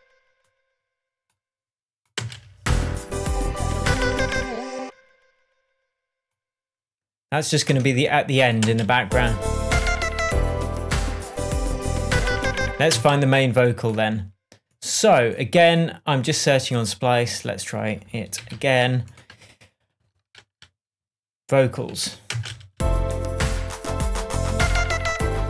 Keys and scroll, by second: 2.5 space, 4.8 space, 8.1 BackSpace, 9.0 space, 13.3 space, 18.8 super+l, 22.4 Tab, 22.7 space.